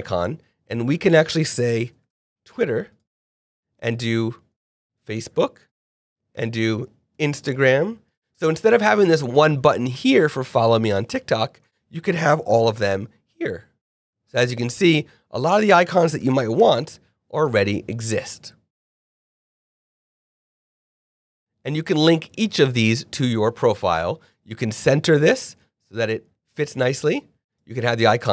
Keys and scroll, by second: 1.8 t, 2.0 w, 2.0 i, 4.8 f, 4.9 a, 5.8 e, 7.1 i, 7.1 n, 12.5 t, 12.7 k, 16.1 f, 16.2 l, 16.4 k, 18.7 l, 18.9 i, 19.0 n, 19.1 k.